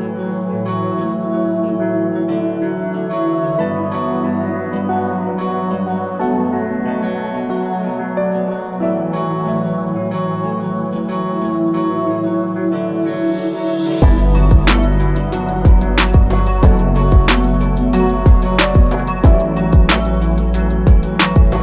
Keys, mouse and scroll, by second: 3.5-6.5 drag, 7.0 click, 9.3-9.7 scroll up 2, 9.8 alt+middle click, 10.1 alt+click, 11.1 alt+click, 11.9 alt+click, 12.2-12.6 scroll up 3, 12.7 alt+middle click, 13.2-13.8 scroll down 4, 13.9 alt+middle click, 14.2 scroll down 2, 14.6-15.3 shift+right drag, 15.9 shift+middle click, 15.9 scroll up 1, 16.4 click, 17.3 click, 18.2 click, 19.4 shift+right click, 20.5 scroll up 2.